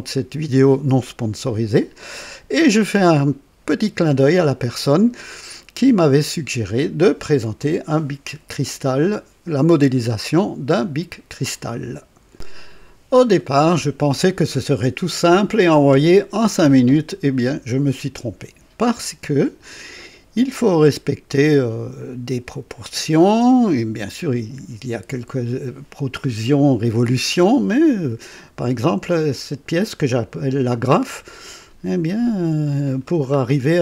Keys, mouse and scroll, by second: 7.6-11.5 drag, 33.3 scroll up 2.